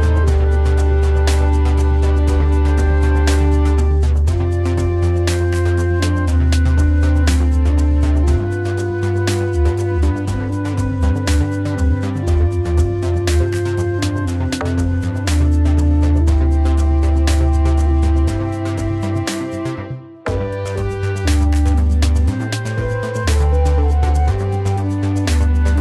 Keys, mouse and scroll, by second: 5.0 right click.